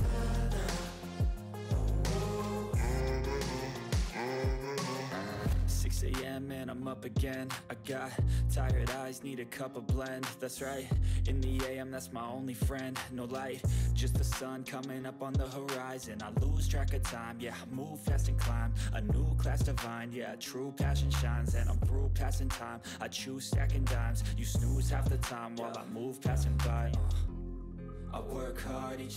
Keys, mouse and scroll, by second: 2.0 click, 2.9-3.6 click, 3.9-9.5 typing, 11.0 shift+1, 11.5 ctrl+a, 12.2 click, 14.6 ctrl+scroll up 1, 14.8-16.0 drag.